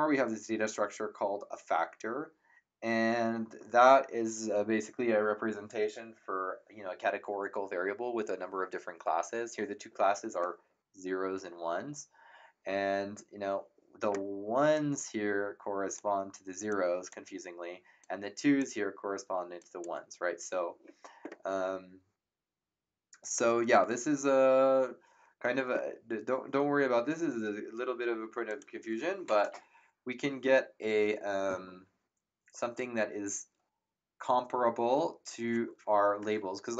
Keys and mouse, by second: 14.7 click, 16.7 click, 18.0 click, 19.5 click, 28.5 click.